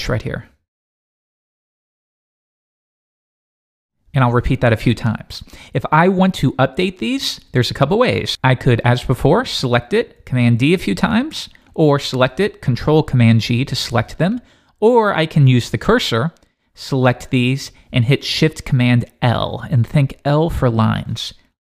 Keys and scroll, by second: 2.0 shift+super+Left, 2.3 super+c, 2.4 super+Right, 2.6 Return, 2.9 super+v, 3.6 Return, 5.8 super+v, 8.3 Escape, 13.0 super+d, 13.2 ctrl+super+g.